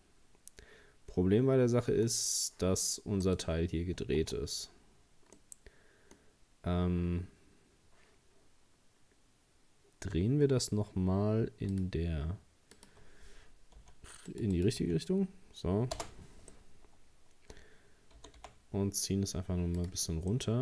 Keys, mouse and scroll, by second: 3.3 right click, 4.2 Tab, 5.4-7.0 middle drag, 7.0 Tab, 11.7-16.5 drag, 16.5-18.2 middle drag, 18.2 g, 20.3-20.6 middle drag.